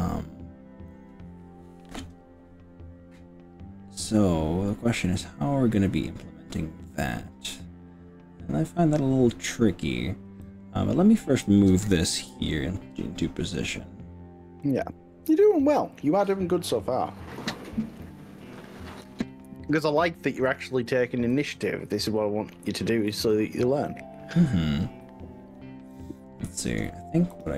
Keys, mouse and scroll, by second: 10.5-11.5 drag, 12.2 g, 14.7 click, 16.1 click, 18.1-19.1 drag, 21.3 s, 22.9 click, 23.1 ctrl+z, 25.9 click, 27.3 click.